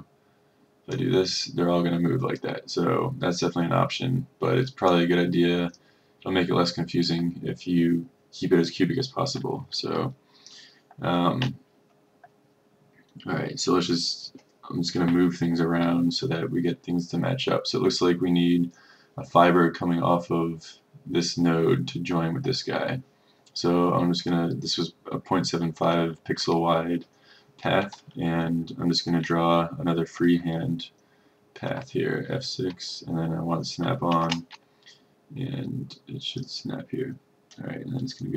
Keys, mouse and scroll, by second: 31.8 F6, 34.2 shift+5, 36.5-38.3 drag.